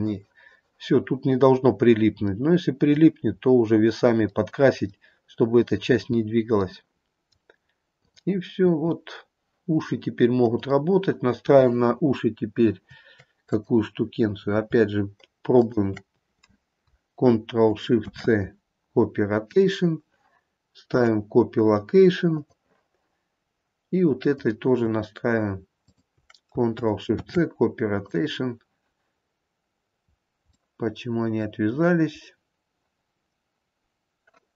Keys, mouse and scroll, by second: 2.3 scroll down 1, 2.5 middle click, 3.5 middle click, 3.5-4.5 scroll up 3, 4.5 middle click, 5.4 middle click, 6.3-6.9 scroll down 2, 6.9 middle click, 8.8 click, 8.8 r, 11.6 click, 13.6 click, 15.7 shift+click, 18.1 ctrl+shift+c, 21.1 click, 24.4 click, 25.9 shift+click, 27.3 ctrl+shift+c, 30.3-30.7 scroll up 1, 30.7 middle click, 30.9 middle click.